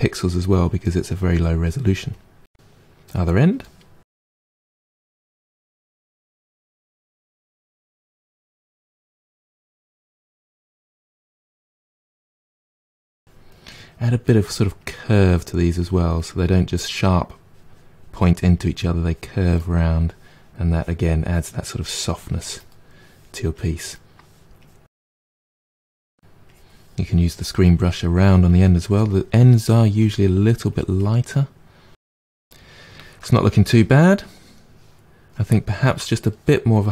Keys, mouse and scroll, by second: 1.5-3.0 middle drag, 3.0 click, 3.9 middle click, 4.4-6.2 drag, 6.2 middle click, 6.4-7.7 drag, 7.7 middle click, 8.2-9.6 drag, 9.6 middle click, 9.9-11.1 drag, 11.1 middle click, 11.4 click, 12.3 middle click, 12.6-19.5 drag, 19.5-20.7 middle drag, 20.7-22.7 drag, 22.7 middle click, 23.5 click, 23.9 middle click, 24.6 click, 25.2 middle click, 25.6-29.8 drag, 29.8 middle click, 30.7 click, 31.4-36.9 middle drag.